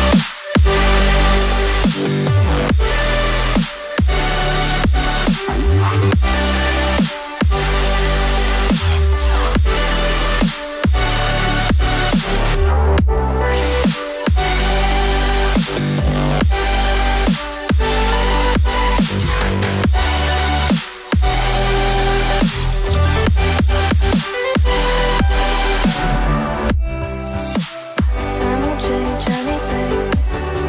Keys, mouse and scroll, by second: 10.4-11.2 typing, 11.5 Tab, 18.1 double click, 23.0 right click, 23.7 right click.